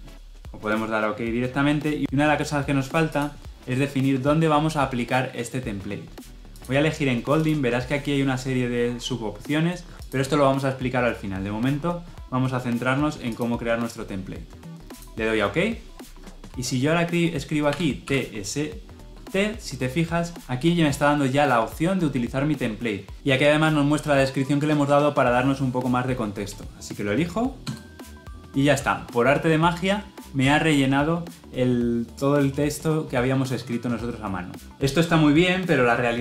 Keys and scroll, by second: 27.5 Return.